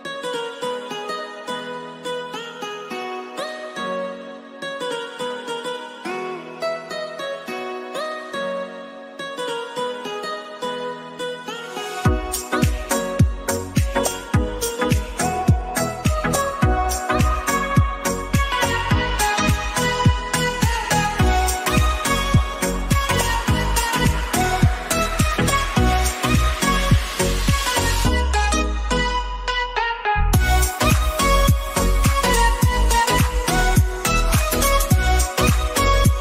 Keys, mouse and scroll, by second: 6.3-10.3 shift+drag, 10.3 Down, 11.7-13.9 shift+drag, 16.7 click, 20.1-25.8 typing, 27.0 click, 29.6 click, 30.1-30.8 scroll down 1, 30.8 click, 34.3 click.